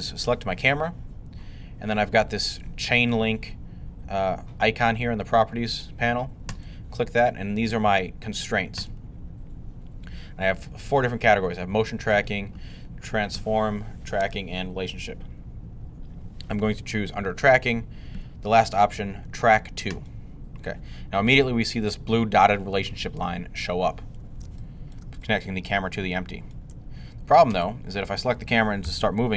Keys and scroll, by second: 28.7 g.